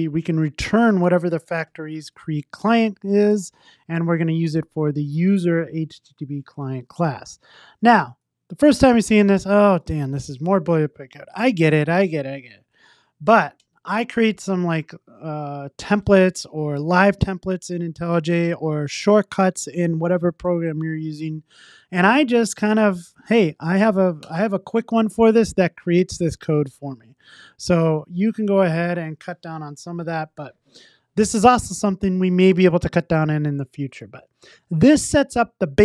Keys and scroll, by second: 2.1 Return, 3.3 Tab, 24.2 Return, 27.1 super+z, 29.3 super+s.